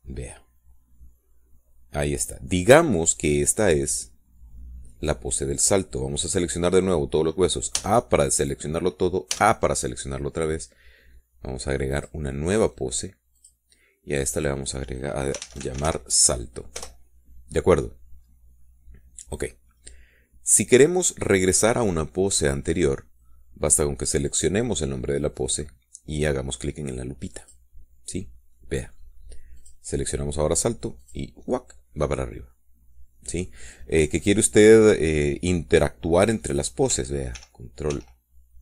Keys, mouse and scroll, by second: 0.8 click, 1.5-7.4 middle drag, 9.1 a, 10.7 a, 13.3 click, 14.7 click, 15.5 click, 16.7-17.3 typing, 18.1 Return, 22.5 scroll down 2, 22.8-24.0 drag, 24.0 middle click, 25.6 click, 28.8 click, 29.6 scroll down 1, 30.0 middle click, 30.5-31.0 scroll up 1, 31.0 click, 31.2-31.8 scroll up 1, 32.4 click.